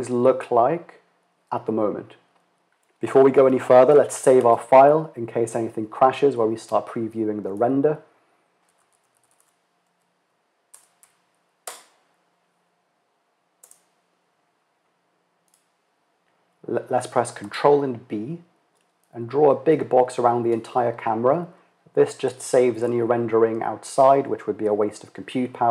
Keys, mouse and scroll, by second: 5.0 ctrl+s, 17.0 ctrl+b.